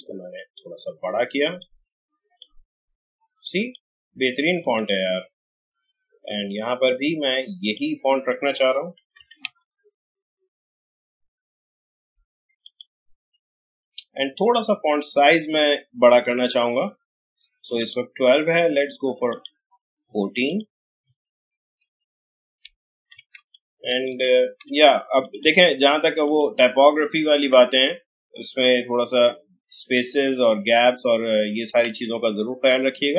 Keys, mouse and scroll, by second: 7.6 click, 8.7-10.3 typing, 12.6 click, 15.0 alt+scroll up 1, 15.6 alt+scroll down 1, 17.8 click, 21.8-22.3 alt+scroll up 1, 22.3-23.1 alt+scroll down 1, 23.3 space, 23.5 click, 24.0 alt+space, 24.8-25.1 alt+scroll up 1, 25.1 click, 28.7 Return, 29.9 Down, 32.5 Return.